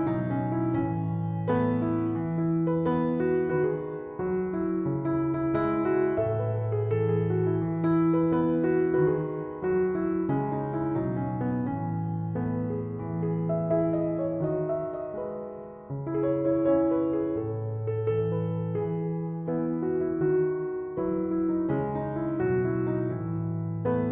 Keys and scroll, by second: 10.2 Escape, 21.5 1, 22.1 5, 22.4 Return.